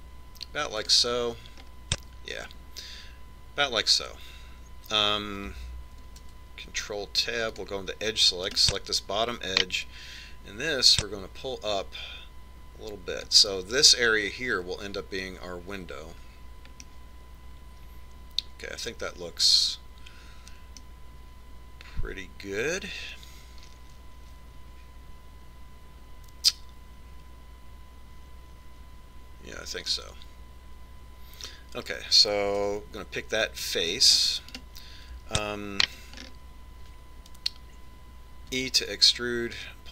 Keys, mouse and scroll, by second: 2.7-4.6 middle drag, 7.3 ctrl+Tab, 9.6 right click, 10.9-12.4 drag, 18.0-19.7 middle drag, 31.1-32.8 middle drag, 33.8 ctrl+Tab, 35.7 right click, 37.4-39.5 middle drag, 39.8 e.